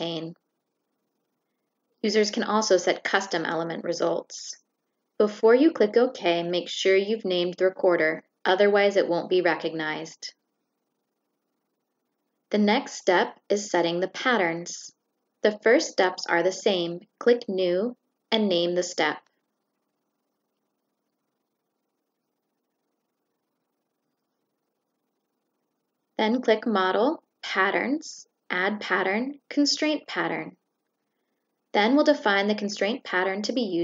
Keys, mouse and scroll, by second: 0.0 shift+click, 0.6 click, 12.0 click, 16.1 click, 18.3 click, 19.3 click, 26.6 click, 31.5 click, 32.6 click.